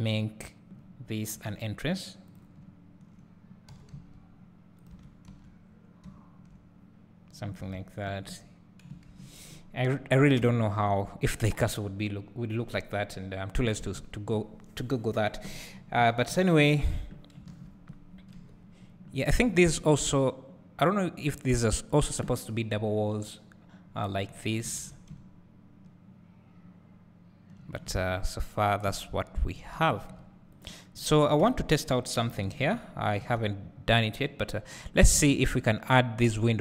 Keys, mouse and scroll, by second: 0.2 click, 2.3-5.0 drag, 2.6 `, 3.8 e, 5.0 Tab, 5.4 `, 5.6 scroll down 1, 6.2 `, 7.2-8.2 scroll up 1, 8.2 `, 18.4 KP_7, 19.1 scroll down 1, 31.4 KP_1, 33.2 alt+a.